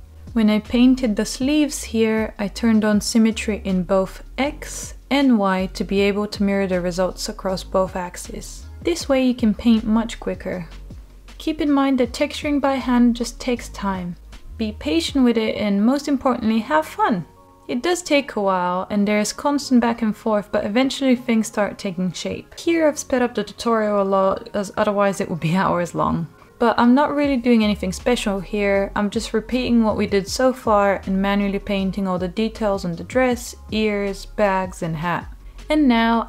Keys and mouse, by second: 0.1 ctrl+z, 0.3 click, 0.7 click, 1.2 middle click, 1.3 click, 1.8 click, 2.1 click, 2.3 click, 2.4 click, 2.6 click, 2.8 click, 3.0 click, 3.2 click, 3.6 click, 3.7 ctrl+z, 4.0 click, 4.3 ctrl+z, 4.4 alt+middle click, 4.6 click, 4.9 ctrl+z, 5.0 alt+middle click, 5.5 click, 5.9 alt+middle click, 7.3 click, 8.1 alt+middle click, 8.8 alt+middle click, 9.0 click, 9.6-10.7 drag, 10.7 alt+middle click, 11.7 click, 12.1 click, 12.5 click, 13.4 click, 13.7 click, 14.0 click, 15.0 click, 15.6 ctrl+z, 15.8 click, 16.0 click, 16.3 ctrl+z, 16.3 click, 16.6 click, 16.9 ctrl+z, 17.0 click, 17.4 click, 17.8 click, 19.4 click, 19.7 click, 20.2 click, 20.6 ctrl+z, 20.7 click, 21.8 click, 22.1 ctrl+z, 22.3 click, 22.6 click, 23.2 alt+middle click, 23.4 middle click, 23.6 shift+middle click, 24.4 click, 24.7 ctrl+z, 24.9 click, 25.2 click, 25.3 ctrl+z, 25.5 click, 25.6 click, 25.8 click, 26.0 ctrl+z, 26.1 ctrl+z, 26.4 click, 26.7 click, 27.0 alt+middle click, 27.2 click, 27.5 alt+middle click, 27.7 click, 27.9 alt+middle click, 28.1 click, 28.6 click, 28.9 alt+middle click, 29.7 click, 30.0 alt+middle click, 30.3 click, 30.4 alt+middle click, 30.9 ctrl+z, 31.1 click, 31.2 alt+middle click, 31.5 click, 31.9 alt+click, 32.2 alt+middle click, 32.4 alt+middle click, 32.5 click, 33.1 alt+middle click, 33.5 alt+middle click, 33.8 click, 34.1 alt+middle click, 34.3 click, 34.5 alt+middle click, 36.0 Tab.